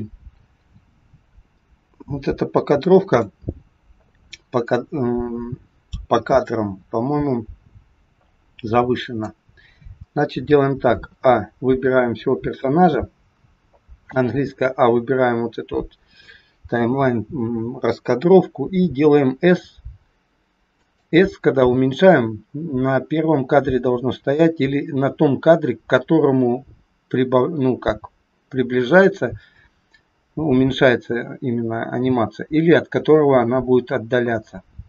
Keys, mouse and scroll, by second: 4.7 click, 11.1 a.